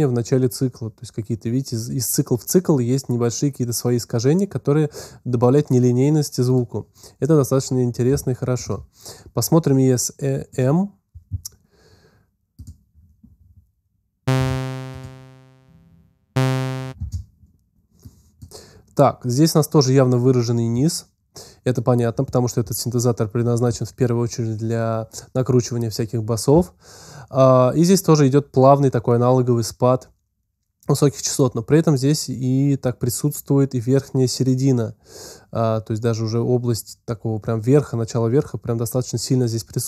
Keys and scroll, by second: 14.2 space, 16.8 space.